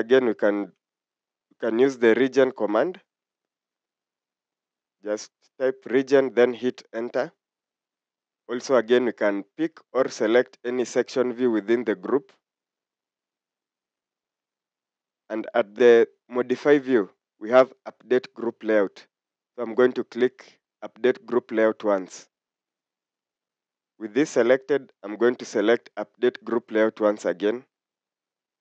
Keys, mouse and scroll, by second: 0.6-3.0 typing, 3.6 Return, 23.4 typing.